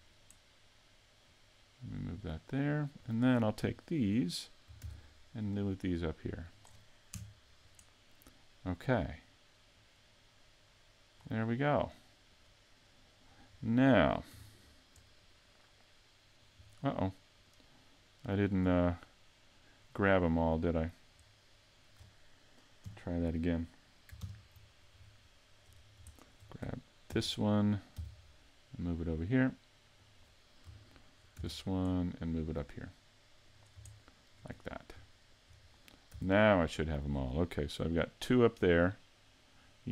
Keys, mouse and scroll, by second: 0.0 right click, 1.3 click, 3.0 right click, 3.8 shift+middle click, 4.9 shift+d, 6.6 click, 7.1 KP_Decimal, 9.7 click, 11.8 right click, 12.3 right click, 13.5-14.4 scroll down 5, 14.4 a, 14.7-15.1 scroll down 2, 15.1 middle click, 16.6 scroll down 1, 17.4 right click, 19.1 middle click, 20.7 right click, 21.3 middle click, 22.9 KP_3, 24.2 ctrl+KP_3, 25.3 shift+middle click, 25.8 scroll up 3, 27.1 shift+d, 30.2 click, 31.4 shift+d, 33.6 click, 34.0 shift+middle click, 34.5 scroll up 4, 35.2 shift+middle click, 35.7-36.5 scroll down 2, 36.1 z, 36.5 middle click, 37.1 scroll down 2, 37.8 middle click, 38.6 scroll up 2, 39.7 scroll down 1.